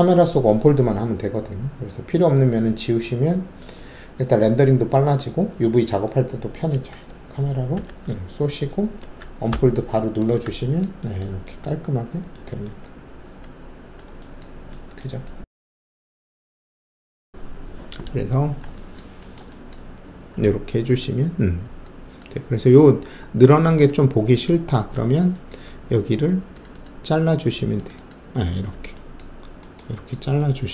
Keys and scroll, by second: 7.7 ctrl+shift+c, 9.4 alt+d.